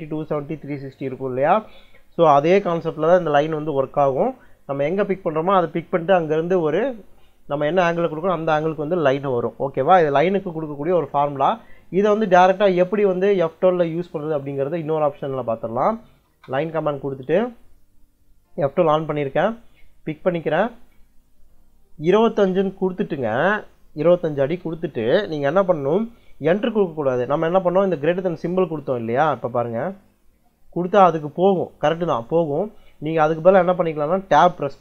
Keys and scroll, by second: 13.5 F12, 15.7 l, 16.1 space, 22.5 2, 24.4 ', 29.7 shift+,.